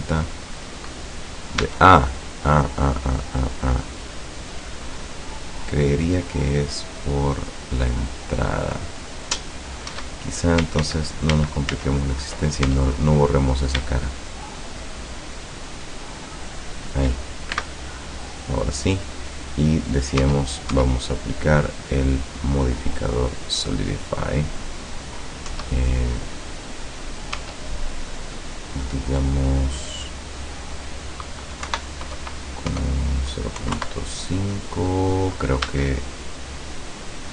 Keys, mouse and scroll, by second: 0.5 scroll up 2, 1.6 Tab, 4.3 click, 5.2 click, 6.1 click, 6.9 click, 8.4 click, 10.0 Tab, 10.9 ctrl+z, 12.7 ctrl+Tab, 13.6 shift+right click, 14.8 shift+right click, 15.5 shift+right click, 16.4 shift+right click, 17.5 shift+x, 18.2 click, 20.3 Tab, 21.6 click, 23.3 click, 25.6 Tab, 27.4 Tab, 30.1 click, 31.7 Right, 32.8 BackSpace, 33.6 KP_5, 33.8 Return, 35.7 Tab, 36.4-37.3 middle drag.